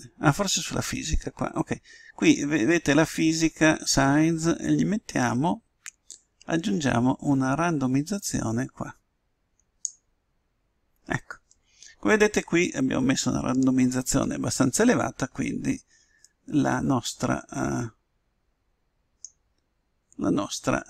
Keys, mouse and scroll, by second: 7.2-8.7 drag, 17.4-19.2 middle drag.